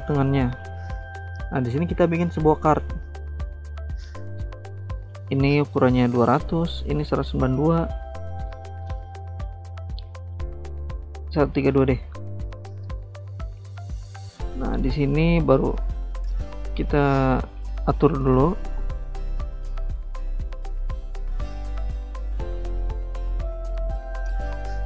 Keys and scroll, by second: 5.7-7.4 typing, 8.0 Return, 10.4-13.5 typing, 13.7 Return.